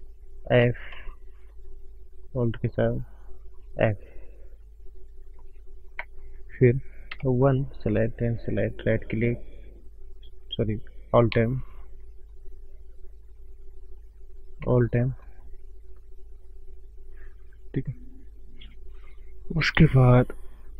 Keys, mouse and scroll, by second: 1.9 click, 1.9 f, 2.6 alt+click, 2.8 alt+click, 4.3 click, 4.6-5.0 scroll down 3, 5.3 click, 5.6 scroll up 2, 7.5 click, 7.5 1, 8.1 shift+click, 8.7 right click, 11.9 ctrl+m, 14.9 alt+m, 16.1 click, 16.6-17.0 scroll up 2, 17.0 scroll down 2.